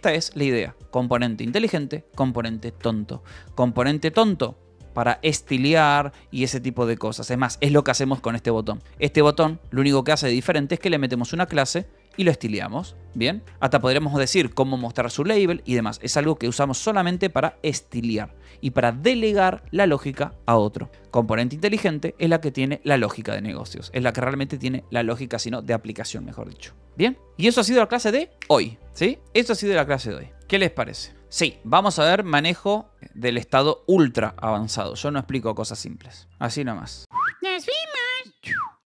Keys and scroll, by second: 0.1 j, 0.4 k, 2.6-4.6 typing, 6.9 Escape, 7.5-11.8 typing, 13.4 Escape, 13.6 j, 14.2 shift+v, 15.4 Escape, 15.6 k, 16.3 j, 16.9 j, 21.0 Escape, 21.9-24.0 typing, 26.7 Escape.